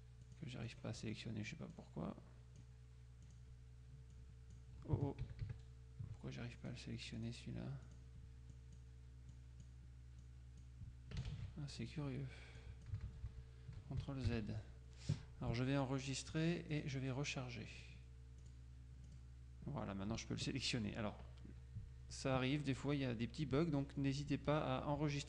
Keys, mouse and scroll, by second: 0.3-1.3 drag, 1.8-3.1 drag, 3.3 click, 4.2-5.1 drag, 5.3 ctrl+KP_5, 6.6 click, 8.0 click, 9.5 click, 11.3 ctrl+a, 11.9 ctrl+click, 12.7 click, 13.2 ctrl+z, 14.4 KP_5, 16.1 click, 16.9 click, 17.9 click, 18.5 click.